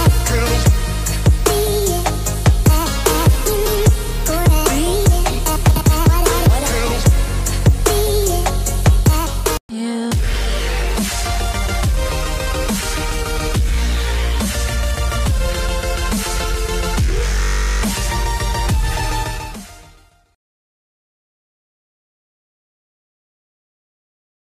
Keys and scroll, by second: 4.4 ctrl+shift+s.